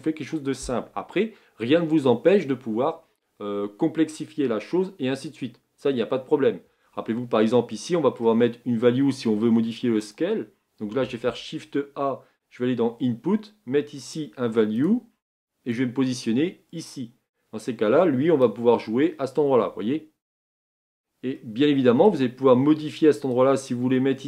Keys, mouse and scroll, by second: 16.9-24.2 drag.